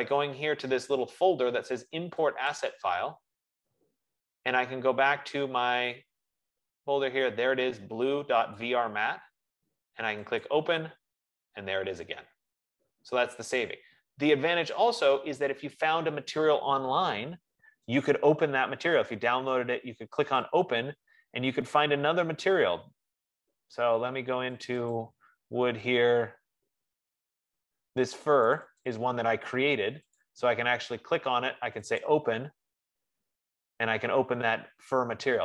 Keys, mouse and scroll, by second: 7.4-8.3 scroll, 9.5 click, 11.5 click, 20.7 click, 22.6 middle click, 22.7 middle click, 23.0 F15, 25.0 click, 25.4 click, 28.8 click, 29.2 click, 30.7 click, 32.5 click.